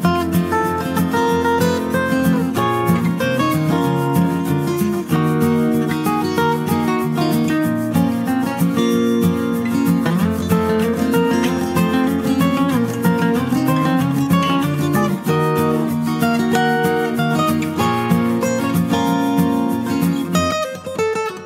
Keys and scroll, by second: 12.4 Return, 14.6 ctrl+t.